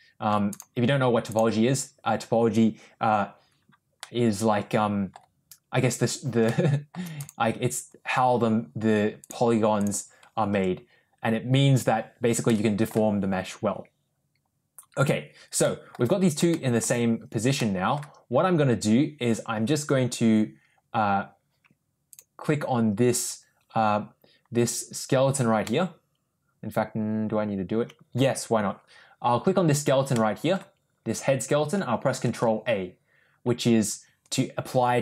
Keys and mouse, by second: 3.9-5.0 middle drag, 6.3 shift+middle click, 7.1 click, 10.4 Tab, 12.4 middle click, 14.8 click, 15.5 middle click, 16.4 shift+middle click, 17.4 middle click, 22.0 click, 25.5-28.0 middle drag, 30.1-30.4 middle drag.